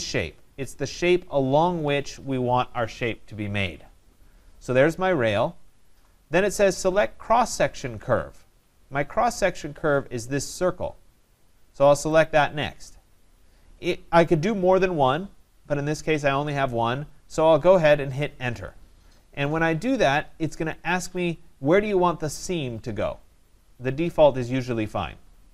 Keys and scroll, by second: 18.5 Return.